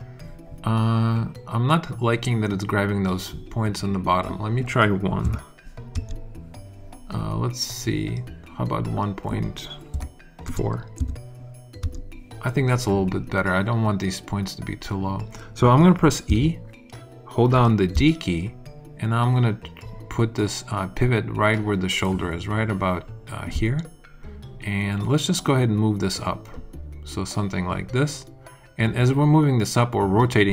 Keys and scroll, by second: 5.2 |, 5.9 Return, 9.9 |, 10.4 ., 10.9 4, 11.8 Return, 16.2 e, 17.9 d.